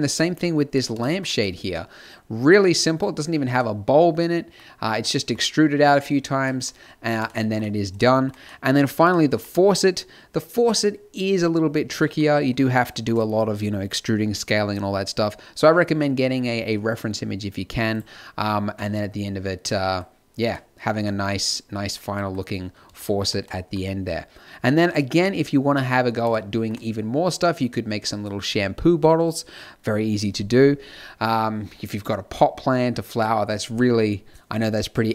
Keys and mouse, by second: 0.0-1.7 middle drag, 2.5 e, 2.5 s, 3.7 g, 5.5 e, 5.7 click, 5.7 e, 5.7 s, 7.5 e, 8.0 s, 10.4-16.8 typing, 10.5 Tab, 12.1 ctrl+n, 15.7 Tab, 15.8 ctrl+1, 15.8 Tab, 15.9 ctrl+r, 16.4 click, 17.3 ctrl+z, 17.5 click, 18.4 click, 19.7-21.4 middle drag.